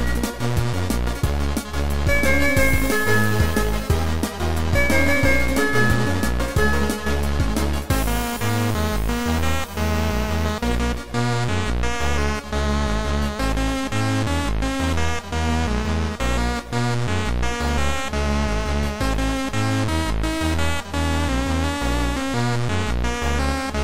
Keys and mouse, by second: 1.5 right click, 1.5 click, 2.6 right click, 3.8 click, 4.3 click, 7.3 click, 8.0 click, 8.6 click, 10.1 click, 11.1 ctrl+z, 11.1 click, 12.1 click, 14.0 click, 18.3 click, 21.2 right click, 22.8 click, 23.2 click, 23.2 right click, 23.5 click.